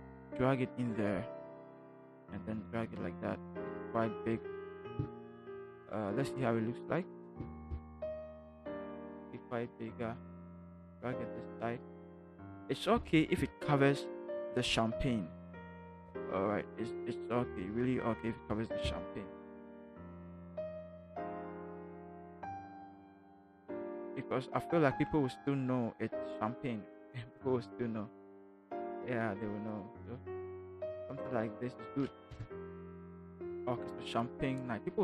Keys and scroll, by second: 32.2 shift+Return.